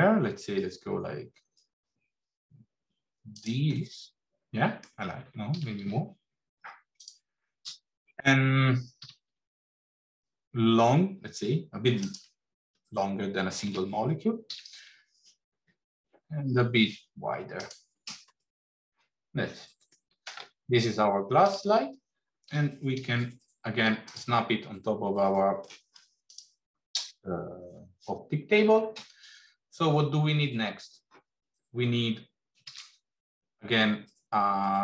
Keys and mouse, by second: 3.7 middle click, 5.4 s, 7.2 middle click, 8.9 s, 13.5 s, 18.4-19.8 middle drag, 21.3 click, 22.4 g, 25.2 middle click, 32.6 shift+a.